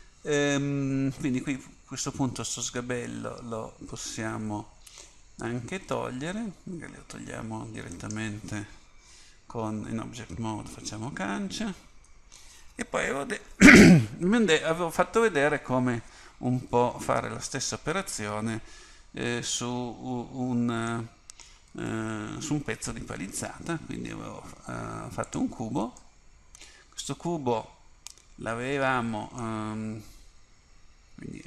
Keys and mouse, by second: 2.6-7.5 drag, 8.0-11.2 right drag, 11.2 Delete, 16.9 KP_1, 21.8 shift+a, 26.1-28.1 middle drag.